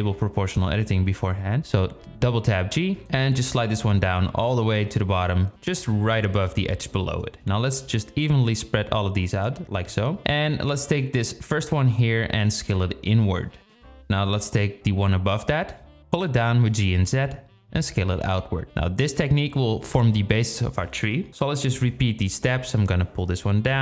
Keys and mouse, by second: 0.9 click, 2.1 g, 7.2 g, 8.6 click, 9.8 g, 11.5 alt+shift+click, 12.0 g, 12.6 alt+shift+click, 13.6 s, 15.7 alt+shift+click, 16.3 g, 17.1 s, 18.2 g, 20.0 alt+shift+click, 20.7 drag, 21.7 g, 22.6 s.